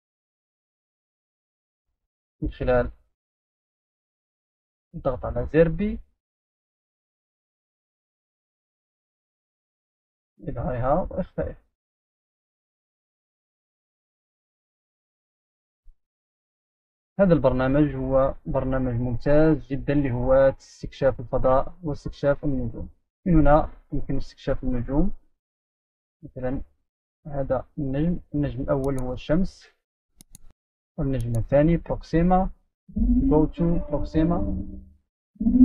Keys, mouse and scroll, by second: 0.0-0.8 drag, 6.0 click, 10.9-11.5 scroll up 2, 11.5-12.6 scroll down 2, 14.7-15.0 scroll down 2, 15.0-16.1 scroll up 2, 17.1-18.2 scroll down 2, 18.2-19.0 scroll up 2, 19.0-19.5 scroll up 1, 19.5-20.3 scroll down 2, 20.3-22.1 scroll down 2, 22.8 click, 23.9-24.9 scroll down 2, 24.9-25.3 scroll up 3, 25.8 right click, 25.8 scroll up 1, 28.2 click, 29.6 click, 32.7 click.